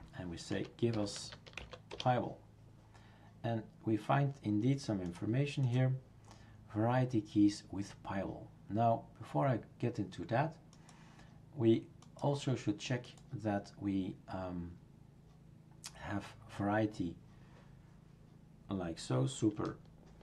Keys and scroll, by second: 0.3-2.1 typing.